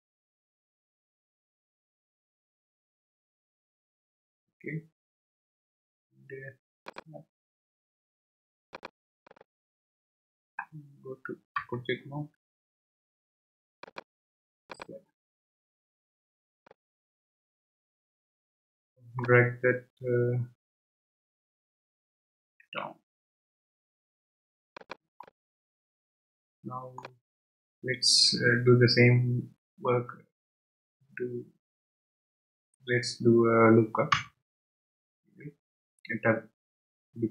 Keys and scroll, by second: 11.6 Tab, 21.6 g, 22.6 z, 34.1 Tab.